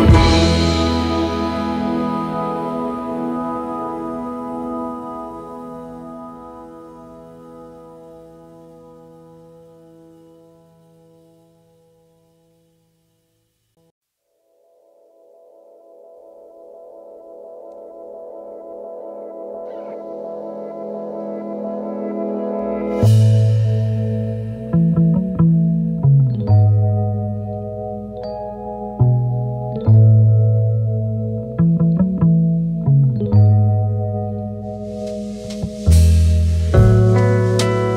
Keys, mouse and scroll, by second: 9.5 v, 12.5 double click, 13.6 ctrl+a, 13.8 ctrl+scroll up 1, 16.3 double click, 23.2 v, 27.7 double click, 28.7 BackSpace, 29.5 space, 30.1 alt+scroll up 1, 32.7 double click, 33.2 v, 35.8 double click, 37.3 v.